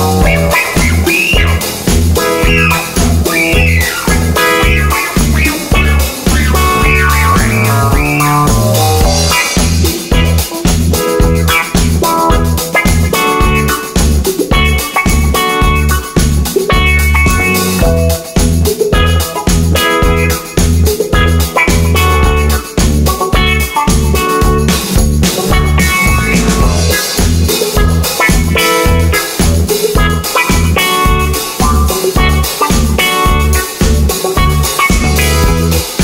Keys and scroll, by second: 6.8 super+c, 20.4 d, 22.5 Page_Up, 23.1 Page_Up, 30.6 super+d.